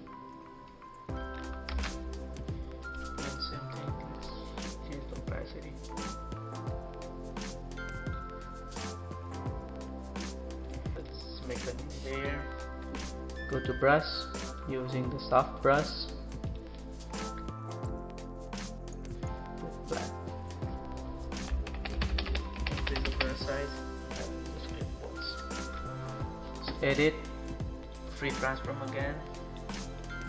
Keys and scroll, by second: 1.7 ctrl+z, 21.7-23.1 typing.